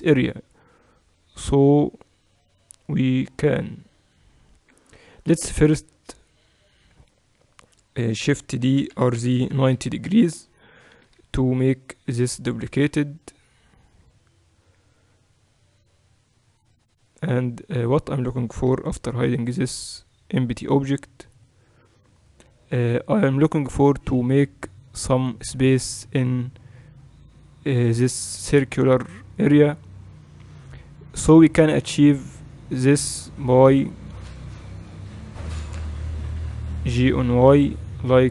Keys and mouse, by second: 5.7 a, 6.9 a, 8.7 shift+d, 11.1-11.6 KP_2, 12.1 KP_6, 12.3 KP_6, 12.5 KP_6, 14.7 KP_7, 16.5-18.2 right drag, 18.2-19.7 middle drag, 18.7 h, 19.7-24.6 right drag, 22.4 h, 24.6-31.7 middle drag, 31.7 Tab, 34.1 a, 34.3 a, 36.1 g.